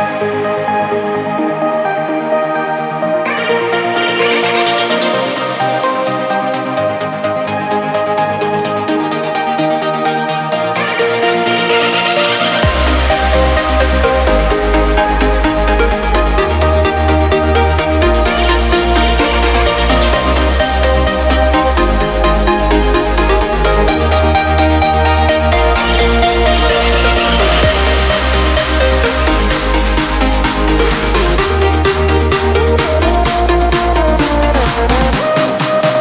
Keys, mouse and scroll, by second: 1.8-5.5 typing, 8.8 click, 13.3 click, 14.0 space, 14.2 click, 14.5 space, 14.6 space, 16.9 click, 20.2 ctrl+v, 20.9 Return, 22.4 click, 23.5-25.9 shift+drag, 27.1 v, 27.6 click, 27.9 space, 28.1 click, 28.4 space, 29.3 click, 30.0-36.0 drag.